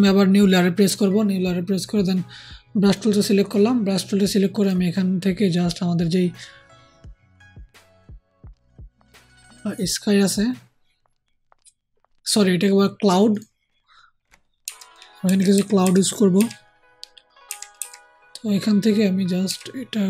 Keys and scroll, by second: 14.6-16.3 typing, 17.4 [, 17.7 [, 19.4 [.